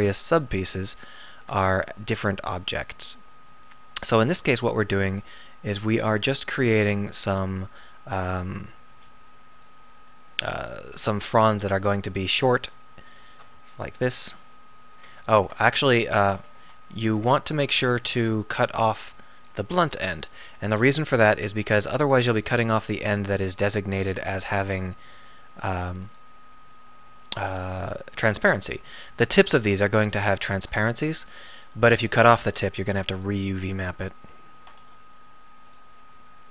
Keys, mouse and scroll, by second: 0.5 r, 1.6 g, 2.9 s, 4.4 g, 5.2 r, 8.9 s, 11.1 g, 12.3-13.5 drag, 13.5 x, 15.3 ctrl+z, 16.2 a, 16.4 a, 16.6 g, 18.0 g, 19.0 g, 20.8 x, 25.4 g, 27.1 g, 30.9 g, 32.4 g, 34.8 r.